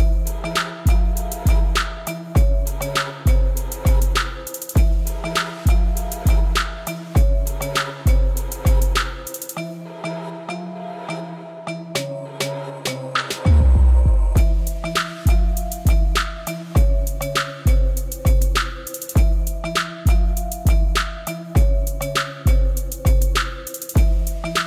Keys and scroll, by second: 1.4 b, 6.8 b, 10.7 b, 14.1 b, 17.9 b, 21.0 b.